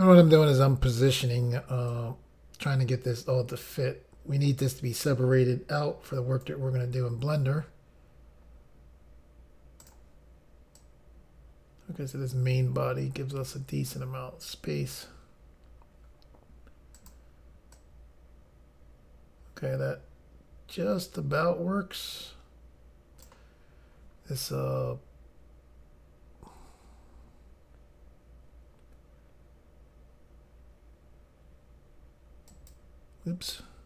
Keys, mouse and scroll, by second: 0.9 click, 1.9 click, 9.9 click, 10.9 click, 17.0 click, 17.8 click, 32.6 click, 33.5 click, 33.6 click.